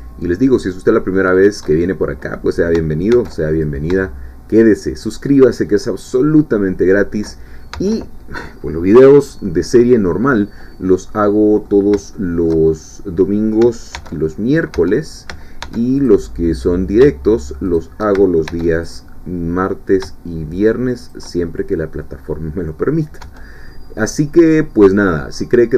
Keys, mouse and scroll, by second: 1.3 shift+click, 3.1 ctrl+r, 3.6 ctrl+click, 6.9 shift+click, 7.7 Tab, 11.1 middle click, 12.1 shift+middle click, 12.7 shift+scroll up 1, 12.9 shift+middle click, 13.9 ctrl+r, 14.8 Tab, 15.6 ctrl+r, 16.0 ctrl+click, 17.6 shift+click, 18.5 ctrl+shift+r, 18.8 ctrl+click, 21.0 shift+click, 21.6-21.9 shift+scroll down 3, 21.9-23.0 middle drag, 23.2 Tab, 23.7-25.6 middle drag.